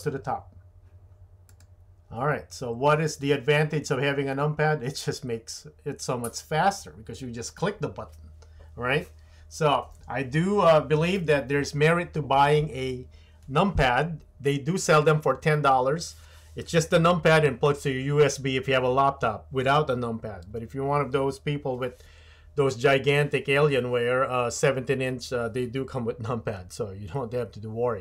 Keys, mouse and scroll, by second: 1.5-28.0 drag.